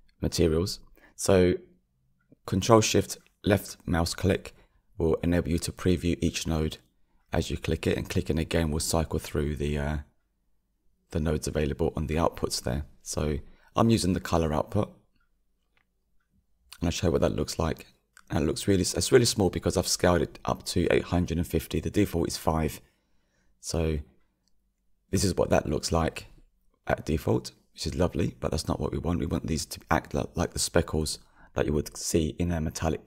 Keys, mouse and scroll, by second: 0.5 ctrl+shift+click, 11.1-11.6 ctrl+shift+drag, 13.4 ctrl+shift+click, 13.7 ctrl+shift+click, 14.2 ctrl+shift+click, 14.6 ctrl+shift+click, 15.3 ctrl+shift+click, 15.9 ctrl+shift+click, 17.2-18.5 scroll up 9, 25.2 click, 26.2-27.0 scroll down 9.